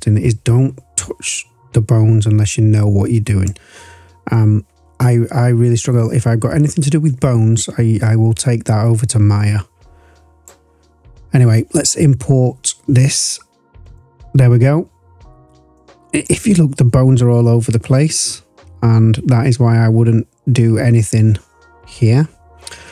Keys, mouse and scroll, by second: 12.1-12.7 scroll down 1, 12.7-13.8 scroll down 1, 13.8 click, 13.8 scroll down 1, 14.6-15.7 scroll up 2, 15.7-16.7 drag, 18.4-18.8 scroll up 2, 20.2-21.6 scroll down 1, 22.0-22.9 scroll down 2.